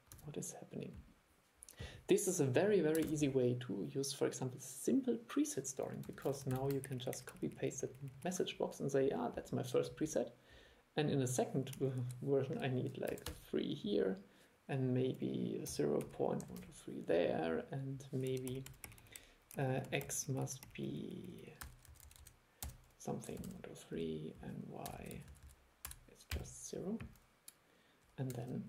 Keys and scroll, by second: 0.3 super+e, 3.2 super+e, 6.3 super+c, 6.6 super+v, 28.5 super+e.